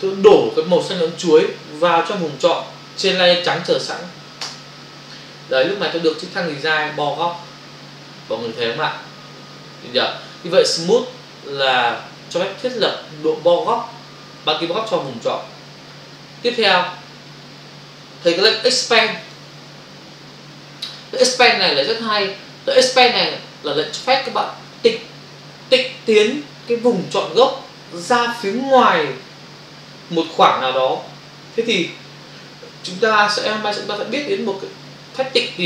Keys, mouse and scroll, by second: 4.4 alt+BackSpace, 16.6 click, 18.9 click.